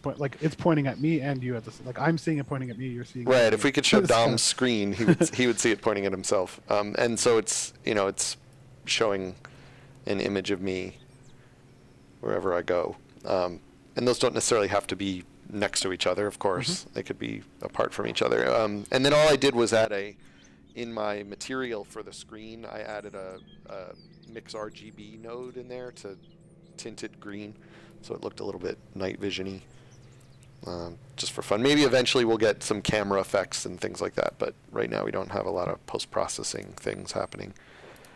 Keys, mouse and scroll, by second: 0.4 d, 2.1 a, 3.5 s, 4.1 w, 8.5 s, 10.7 d, 12.2-13.0 typing, 17.6 click, 18.6 s, 19.6 s, 27.9 click, 35.4 space, 36.5 click, 37.9 click.